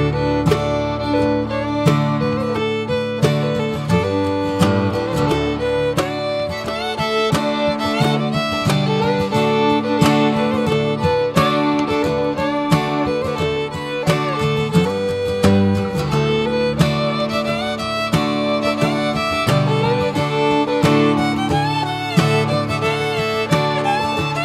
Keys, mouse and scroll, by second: 0.2 scroll down 2, 0.6 middle click, 0.8 scroll up 2, 1.5 ctrl+s, 1.8-2.1 shift+middle drag, 2.1 click, 2.4 a, 4.2 ctrl+z, 5.7 drag, 6.1 click, 6.4 shift+a, 9.4 click, 9.7 scroll down 1, 10.2 shift+a, 14.4-15.1 scroll up 2, 14.7 middle click, 15.1 shift+middle click, 16.1 click, 16.8-18.2 drag, 19.5-24.4 drag.